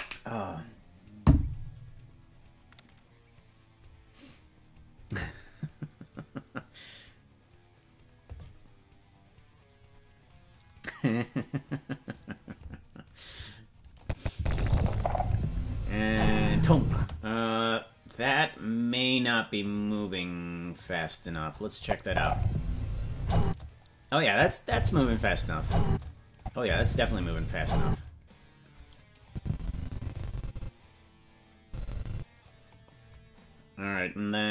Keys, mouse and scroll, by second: 14.0 click, 14.3 space, 17.1 space, 19.8 click, 20.8 click, 21.8 click, 22.0 space, 23.4 space, 24.3 click, 24.6 space, 25.8 space, 26.4 click, 26.6 space, 27.8 space, 29.3-32.7 drag.